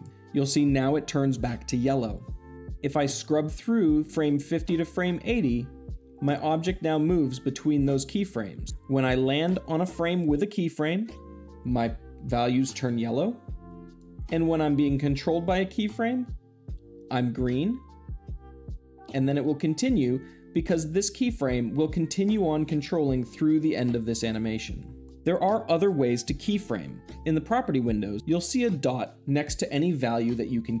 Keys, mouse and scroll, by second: 3.9-5.0 drag, 13.8-14.9 drag, 24.9 drag.